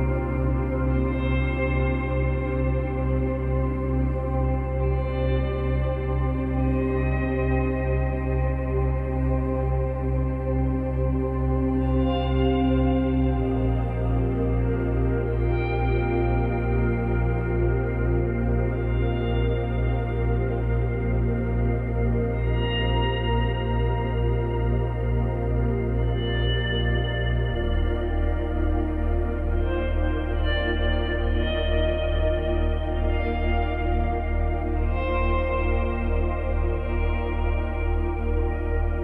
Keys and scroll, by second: 4.2 Delete, 24.0 space, 26.9 space, 35.0 Delete.